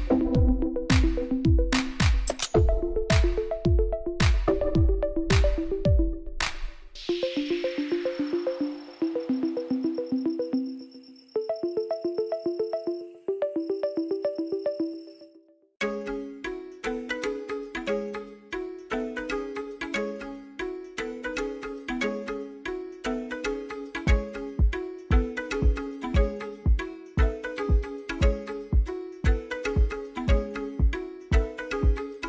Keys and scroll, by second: 7.5 ctrl+z, 8.7 shift+a, 11.0 g, 11.2 z, 11.5 Tab, 11.8 s, 12.0 z, 13.5 s, 13.7 y, 14.8 s, 15.0 x, 16.4 s, 16.7 z, 17.2 Tab, 17.4 g, 17.6 z, 19.4 Tab, 19.8 s, 20.0 x, 21.6 Tab, 22.0 ctrl+2, 22.8 Tab, 23.3 ctrl+r, 24.0 s, 24.1 y, 27.4 ctrl+r, 28.1 Return, 28.3 s, 28.4 x, 30.8 Tab.